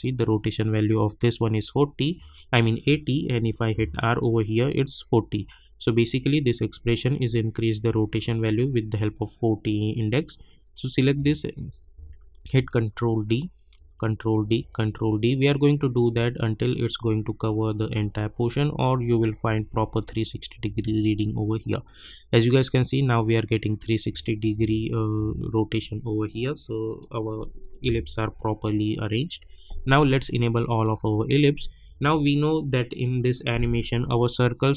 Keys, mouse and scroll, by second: 3.7 r, 10.6 click, 12.4 ctrl+d, 17.8 ctrl+d, 24.5 r, 25.1 r, 26.8 click, 27.8 u, 28.8 scroll down 1, 30.1-33.3 drag, 33.9 scroll up 1.